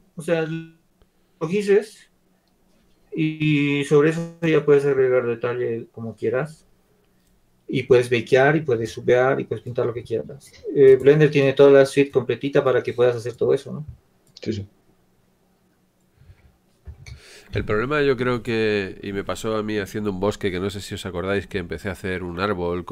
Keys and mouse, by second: 11.8-19.6 drag, 18.4 Tab.